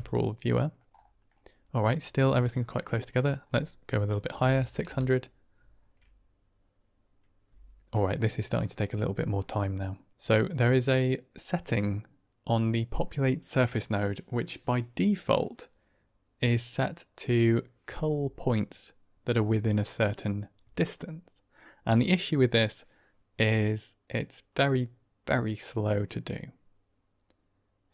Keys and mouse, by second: 0.5 middle click, 1.7 middle click, 3.0-27.9 drag, 4.5 KP_0.